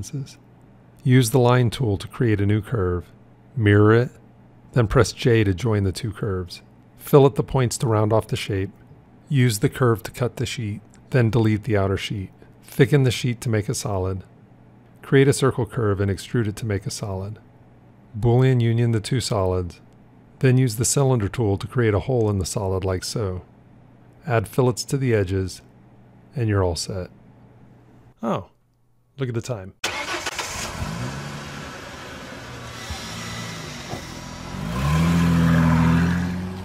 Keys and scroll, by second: 3.7 alt+x, 5.4 j, 7.2 b, 9.5 c, 19.1 q.